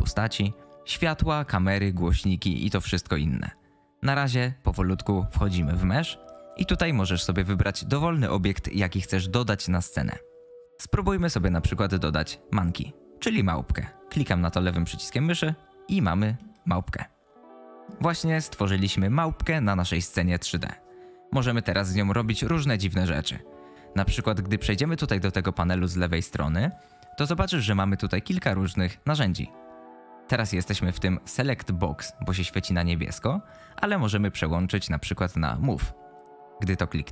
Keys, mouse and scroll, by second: 16.4-17.8 middle drag, 35.7 click.